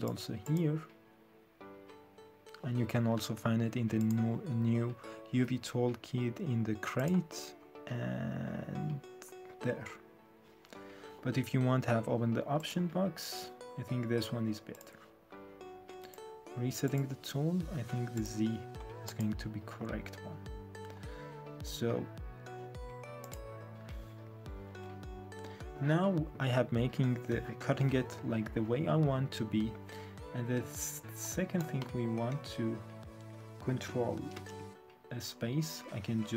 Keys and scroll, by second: 24.7 F8, 34.3 ctrl+space.